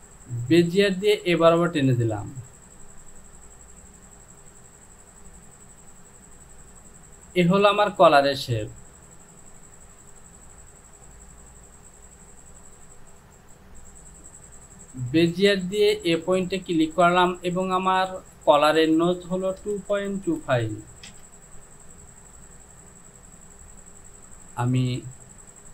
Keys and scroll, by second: 19.7 KP_2, 20.0 KP_Decimal, 20.3 KP_2, 20.6 KP_5, 21.1 Return.